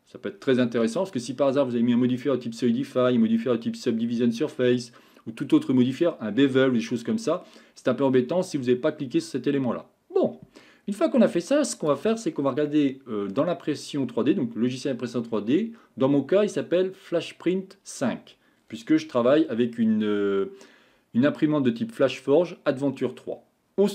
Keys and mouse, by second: 12.7 middle click.